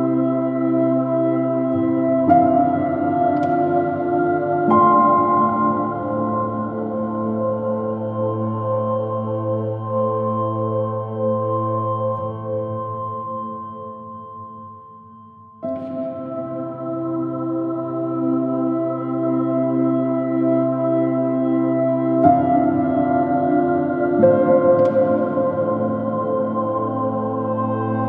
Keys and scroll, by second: 3.8 space, 7.5 space, 10.7 space, 13.3 space, 15.5 super+z, 17.7 b, 25.8 space.